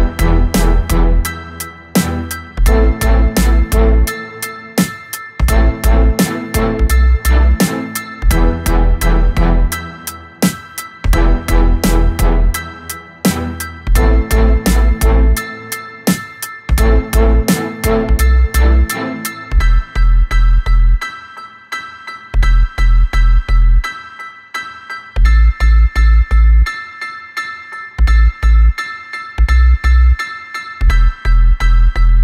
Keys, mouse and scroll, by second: 0.5 click, 1.2-3.1 middle drag, 3.1 KP_1, 4.3 click, 5.7-8.7 drag, 11.6 click, 15.7 click, 16.1 click, 17.0 click, 18.4 click, 22.2 d, 23.0 s, 27.7 click, 29.0 click, 30.3-32.2 drag.